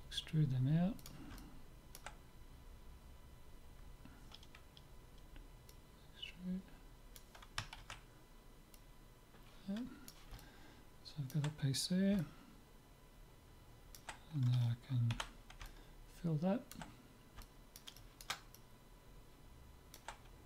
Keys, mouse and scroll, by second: 1.4-4.0 middle drag, 5.7-7.4 drag, 7.8 ctrl+z, 8.8-10.4 drag, 10.4-12.1 middle drag, 12.3-14.0 middle drag, 15.1 f, 15.7-20.4 middle drag.